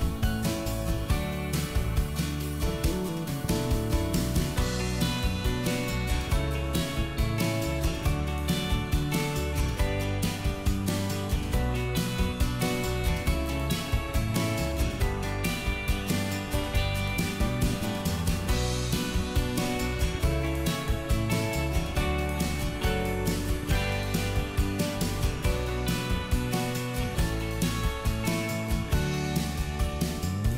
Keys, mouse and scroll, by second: 1.0-1.4 scroll up 1, 1.7 middle click, 2.5-2.8 scroll up 1, 2.8 scroll down 1, 3.6 middle click, 4.3 click, 5.2 Delete, 5.6 click, 6.3 p, 8.0 middle click, 10.1 ctrl+z, 10.3 middle click, 11.5 ctrl+click, 12.5 middle click, 13.2 scroll down 1, 14.2 middle click, 16.1 shift+middle click, 17.5 l, 18.8 click, 20.6 shift+middle click, 21.1-21.4 scroll up 1, 21.4 scroll down 1, 21.8 middle click, 23.8-24.8 scroll up 1, 24.8 click, 25.2 middle click, 26.4 middle click, 27.0 scroll down 1, 27.4 middle click, 27.8 q.